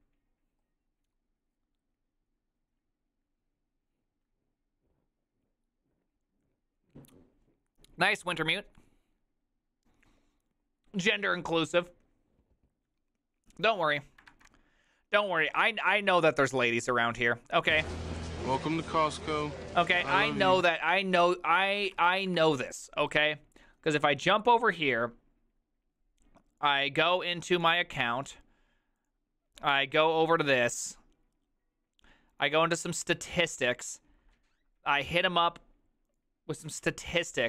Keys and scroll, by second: 14.4 alt++, 15.6 alt+f.